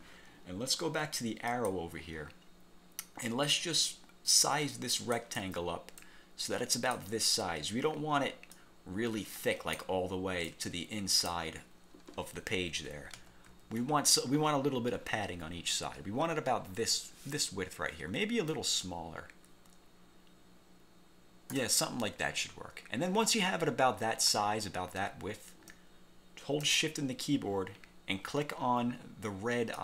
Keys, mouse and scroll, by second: 1.6 click, 3.3-5.4 drag, 6.1 click, 8.6-10.0 drag, 10.6 click, 13.3 ctrl+z, 18.6-21.8 ctrl+shift+drag.